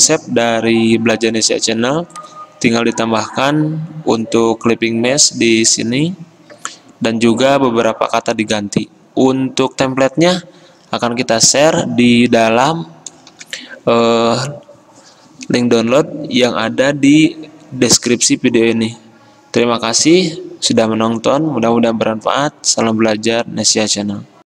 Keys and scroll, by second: 13.5 f, 23.3 Escape.